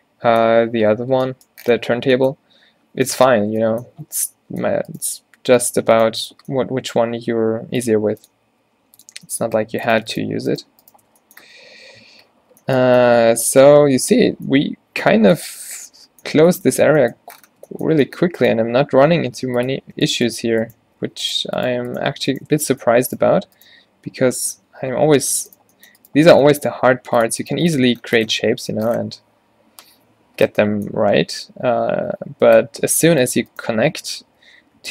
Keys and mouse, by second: 2.1 Tab, 7.3 e, 8.1 r, 8.6 r, 11.1 f, 12.1 Tab, 12.6 a, 12.9 a, 16.4 Tab, 19.1 e, 19.9 click, 21.1 f, 22.5 f, 23.4 q, 24.9 ctrl+z, 25.1 ctrl+z, 26.8 g, 27.6 g, 27.9 Tab, 32.5 Tab, 34.3 z.